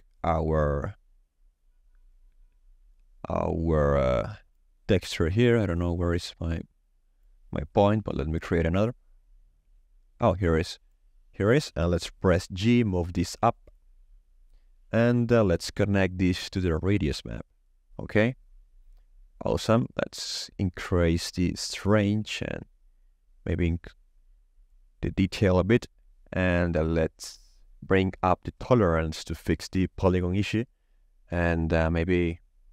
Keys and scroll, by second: 10.0 ctrl+z, 14.0 g.